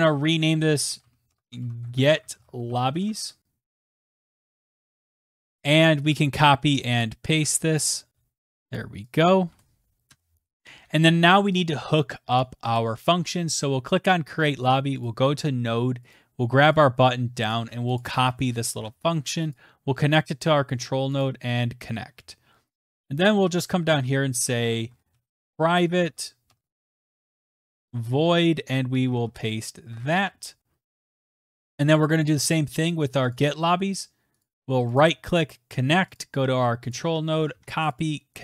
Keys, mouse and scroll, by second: 0.0 click, 0.6-4.7 typing, 5.1 click, 5.2 click, 5.7 ctrl+a, 6.0 ctrl+c, 6.8 click, 7.3 ctrl+a, 7.8 ctrl+v, 8.7 click, 9.1 click, 9.5 Return, 10.0 click, 12.4 click, 12.7 click, 15.0 click, 16.1 click, 16.6 click, 16.8 click, 17.5 click, 17.6 ctrl+a, 18.0 click, 18.2 ctrl+a, 18.7 ctrl+c, 19.5 click, 21.2 click, 22.9 click, 23.2 Return, 23.4 Return, 23.5-30.2 typing, 26.6 click, 31.5 alt+Tab, 31.5 ), 31.5 {, 33.2 click, 34.3 right click, 35.1 click, 36.0 click, 36.8 click, 36.9 ctrl+a, 37.4 ctrl+c, 37.8 click.